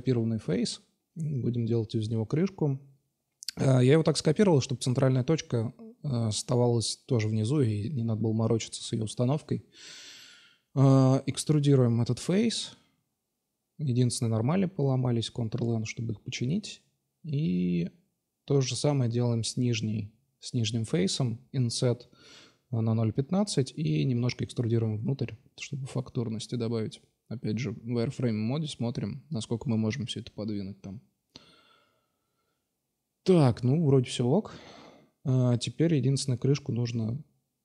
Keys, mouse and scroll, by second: 0.1-0.8 drag, 1.0 click, 4.7 Tab, 6.9-8.5 drag, 9.5 e, 12.3 a, 12.4 a, 13.9 ctrl+n, 14.8-15.5 drag, 17.2 i, 22.6 e, 26.0 middle click, 26.8-27.6 middle drag, 27.9-29.1 drag, 29.4-30.3 middle drag, 30.7-32.0 drag, 32.2-33.1 middle drag, 33.1 Tab, 34.2 alt+h, 35.2 click, 36.1 Tab.